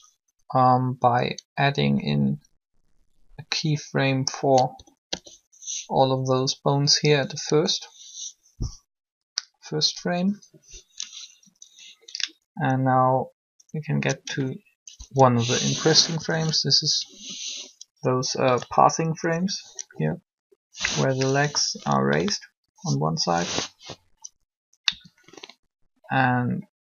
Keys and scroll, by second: 0.6 Down, 4.5 a, 4.8 a, 7.3 i, 14.7 Up, 16.0 3, 19.9 1, 24.8 1.